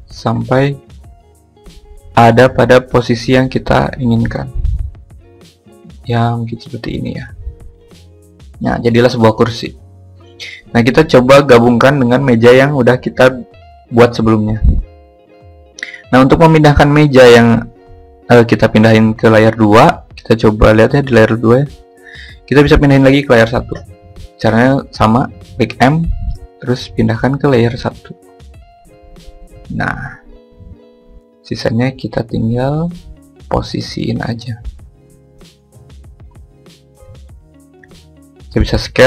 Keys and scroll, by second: 22.6 m, 38.6 s.